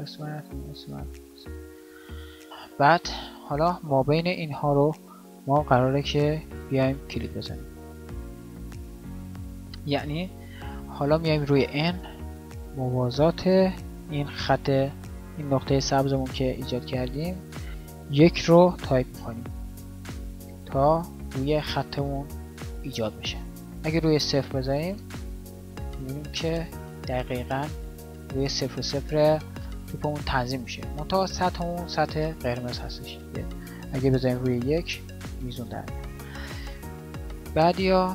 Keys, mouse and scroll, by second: 8.6 g, 10.8 n, 36.8-38.1 drag.